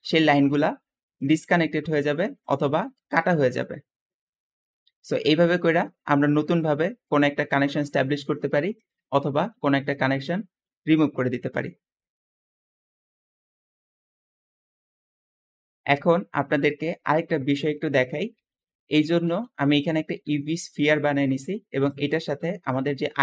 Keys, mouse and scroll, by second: 1.0 ctrl+z, 1.0 click, 3.1 click, 5.4 Escape, 5.8 middle click, 8.8-9.8 drag, 10.1-11.5 middle drag, 19.1 g, 21.3 `, 22.2 click.